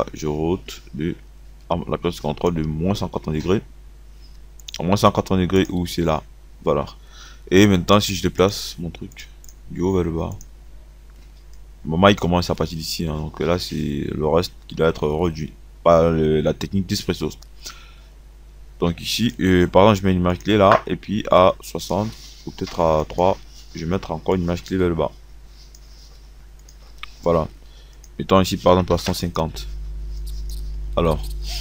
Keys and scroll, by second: 28.8 KP_1, 29.0 KP_5, 29.3 KP_0.